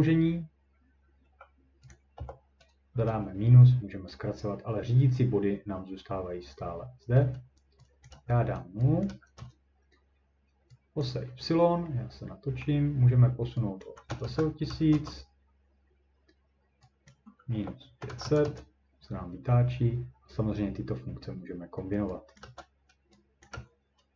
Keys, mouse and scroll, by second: 0.7 typing, 1.9 click, 2.0-2.9 typing, 8.0-9.4 drag, 8.2 0, 9.1 0, 9.4 Return, 11.0 click, 12.6 middle click, 13.7-15.1 typing, 13.8 click, 14.6 scroll down 1, 14.9 Return, 17.1 click, 17.3-18.6 typing, 22.2-23.0 typing, 22.4 click, 23.4 click.